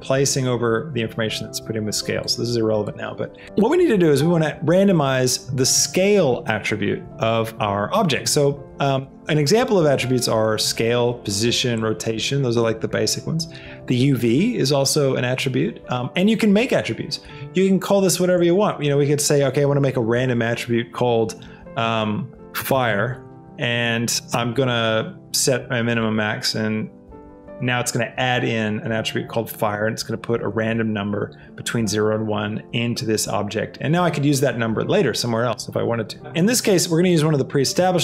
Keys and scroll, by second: 22.7 shift+f, 23.0 e, 37.7 s.